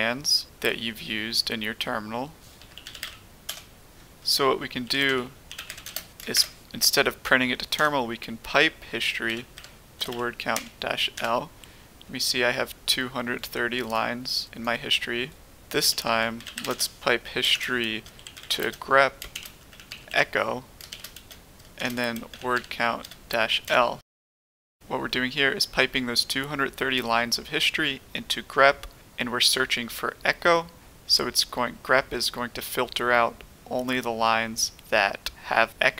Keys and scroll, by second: 2.4-3.4 typing, 4.7-6.3 typing, 7.7 typing, 9.2-10.5 typing, 11.1 Return, 15.7-21.1 typing, 22.1-24.1 typing.